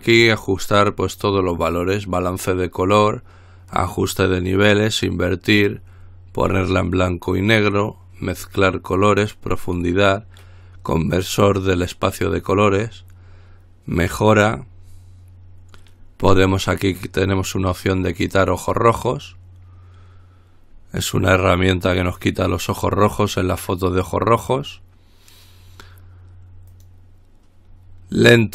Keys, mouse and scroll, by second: 18.9 click, 27.0 click.